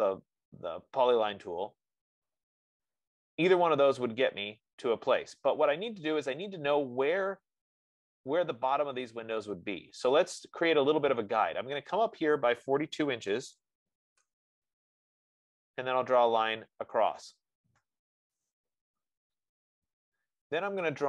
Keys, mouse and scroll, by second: 13.5-13.9 typing, 15.2 Return, 16.0 F15, 17.6-21.0 drag, 18.6 Return.